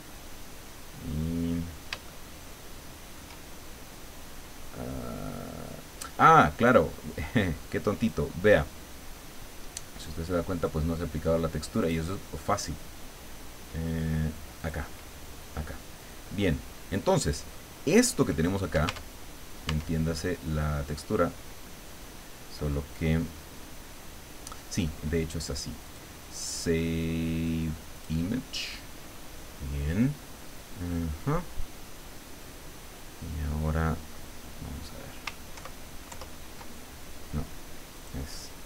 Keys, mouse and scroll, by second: 1.1-1.7 scroll up 1, 2.1-3.4 shift+middle drag, 6.6 click, 8.0 click, 11.8 click, 14.6 click, 15.3 scroll down 2, 16.3-16.6 scroll up 2, 18.9 Tab, 19.7 Tab, 25.9 click, 28.0 click, 35.5 ctrl+Right, 36.1 ctrl+Left, 37.9 click.